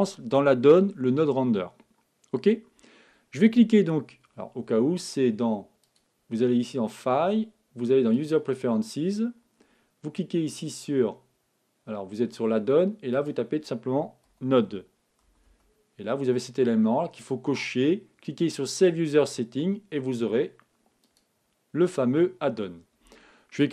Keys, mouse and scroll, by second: 5.8-7.7 drag, 23.6 click.